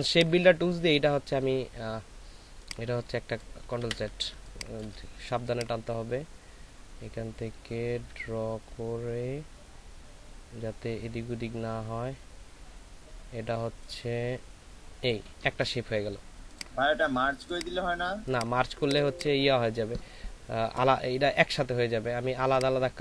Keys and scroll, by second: 3.9 ctrl+z, 4.3 space, 18.6 ctrl+alt+space.